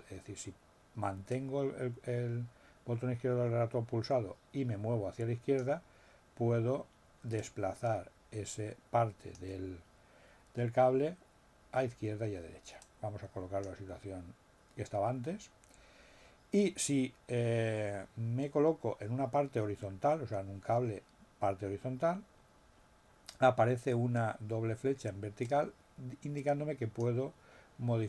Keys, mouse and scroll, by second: 1.3-5.7 drag, 7.3-9.5 drag, 12.8 click, 25.4-27.1 drag.